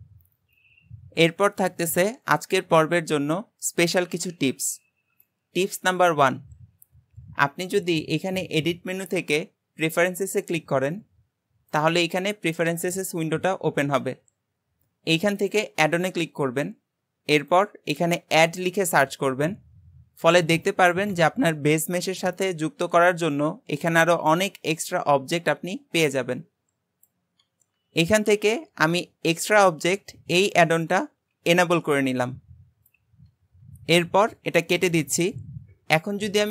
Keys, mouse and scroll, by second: 8.1-11.3 drag.